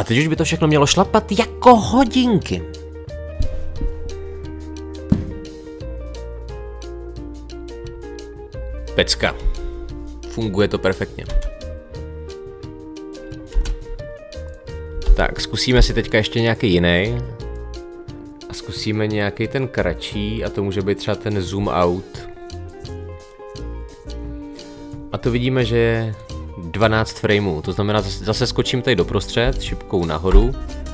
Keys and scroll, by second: 9.5 space, 11.3 space, 13.5 space, 18.1 Delete, 29.4 Up.